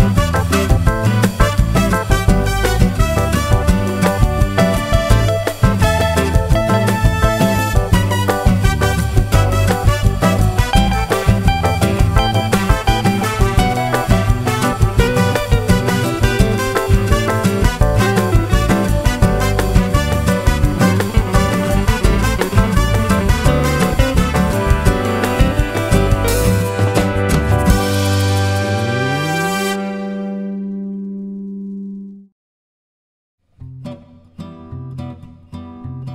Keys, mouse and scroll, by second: 0.6 shift+click, 1.2 shift+click, 1.9 shift+click, 2.5 shift+click, 3.3 KP_Subtract, 3.9 click, 4.6 click, 6.4 KP_Add, 7.1 click, 8.1 Escape, 10.5 shift+click, 13.0 shift+click, 13.5 shift+click, 13.9 shift+click, 15.4 shift+click, 16.8 shift+click, 17.9 shift+click, 18.3 shift+click, 19.0 shift+click, 19.4 shift+click, 21.1 shift+click, 25.5-27.8 shift+drag, 28.5 shift+click, 28.9 shift+click, 29.6 shift+click, 30.2 shift+click, 31.0 shift+click, 31.3 shift+click, 32.3 shift+click, 33.2 shift+click, 34.1 shift+click, 35.0 shift+click.